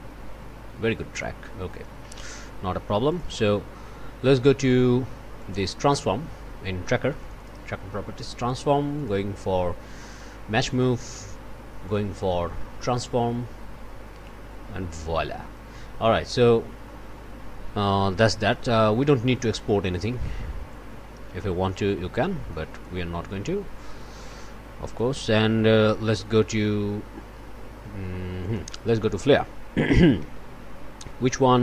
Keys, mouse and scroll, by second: 1.1 click, 3.1 click, 5.3 click, 8.9 click, 11.8 click, 12.9 click, 18.3 middle click, 20.1 middle click, 20.7-21.9 drag, 22.2 click, 22.8-24.2 drag, 24.2 click, 24.8 click, 28.4 click, 28.7 Tab, 29.7-30.7 typing.